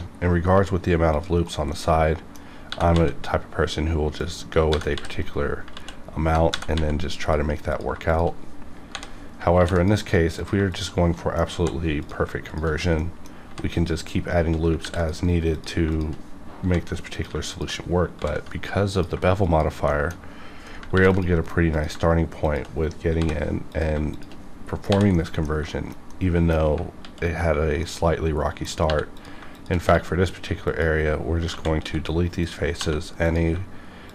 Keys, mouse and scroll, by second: 0.1-0.5 scroll up 1, 1.1 click, 1.3 right click, 1.4 right click, 1.7 middle click, 1.8 middle click, 2.7 g, 2.9 z, 4.2 click, 4.7 g, 4.9 z, 5.2 right click, 5.7 ctrl+z, 6.5 g, 6.7 z, 7.0 g, 7.2 click, 8.0 shift+click, 8.1 shift+click, 8.9 j, 9.5 ctrl+r, 9.7 ctrl+click, 10.0 right click, 10.4 click, 10.7 shift+click, 11.1 middle click, 11.5 j, 12.0 click, 12.4 shift+click, 12.9 middle click, 13.1 middle click, 13.4 j, 14.0 click, 14.8 ctrl+r, 14.9 ctrl+click, 15.2 right click, 15.5 click, 15.9 shift+click, 17.1 click, 17.5 shift+click, 18.9 click, 19.4 shift+click, 19.9 shift+middle click, 20.2 shift+middle click, 20.9 ctrl+r, 21.1 ctrl+click, 21.3 right click, 21.7 click, 23.2 j, 23.7 click, 23.9 click, 24.9 j, 25.1 middle click, 25.1 middle click, 26.1 middle click, 27.0 alt+x, 27.8 middle click, 28.9 3, 29.1 click, 29.5 click, 29.9 x, 30.6 click, 31.5 ctrl+z, 31.8 x, 32.4 click, 32.8 2, 33.2 click.